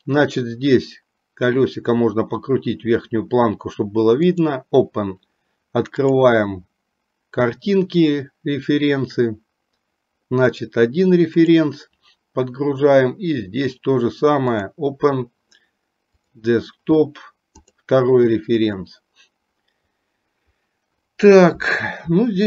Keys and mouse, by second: 4.5 click.